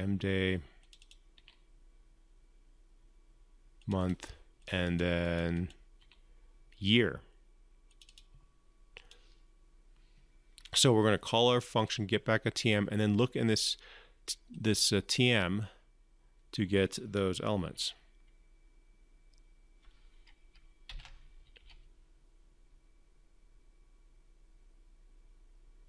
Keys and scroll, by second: 20.6 ctrl+F5.